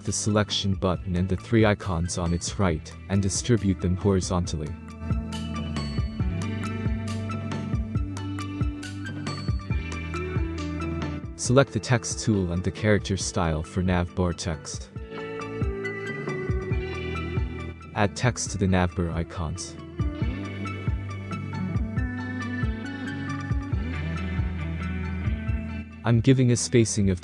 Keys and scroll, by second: 20.9-22.2 typing, 24.0 v, 26.6 Left, 26.8 Left.